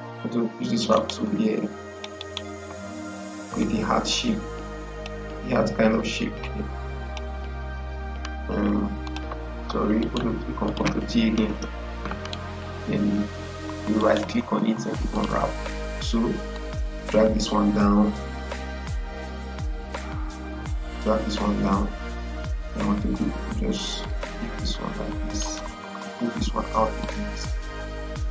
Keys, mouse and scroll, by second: 0.8 right click, 1.8 click, 1.8 click, 2.1 right click, 3.5-8.9 drag, 9.9 right click, 10.5 click, 11.4 ctrl+t, 12.1 right click, 15.0-28.3 drag.